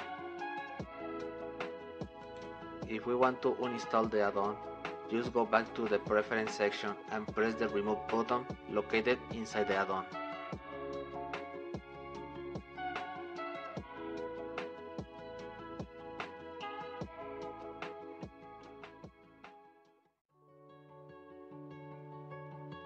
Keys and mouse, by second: 10.4-12.9 drag.